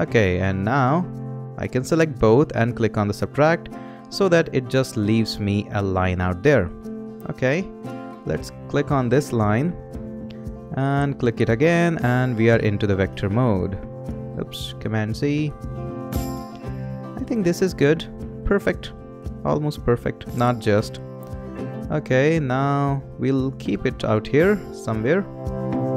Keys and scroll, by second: 14.8 super+z, 16.3 Return.